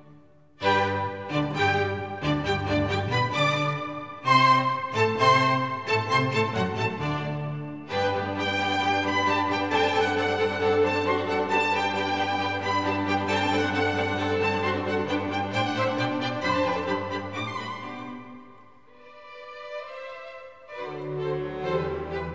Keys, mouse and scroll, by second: 1.2 middle click, 2.3 click, 3.1 n, 5.8 n, 6.4 shift+a, 7.3 Tab, 8.1 shift+a, 11.1 BackSpace, 11.3 Tab, 14.9-18.4 typing, 19.7 Tab.